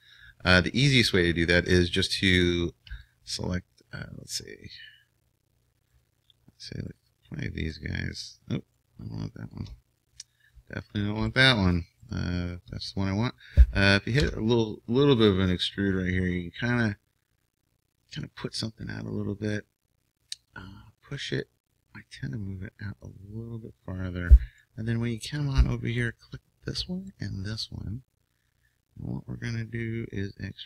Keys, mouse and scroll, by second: 1.7-14.2 right drag, 8.8-11.3 middle drag, 14.2 e, 19.6-23.1 drag, 24.5-27.5 middle drag, 26.0-30.6 right drag.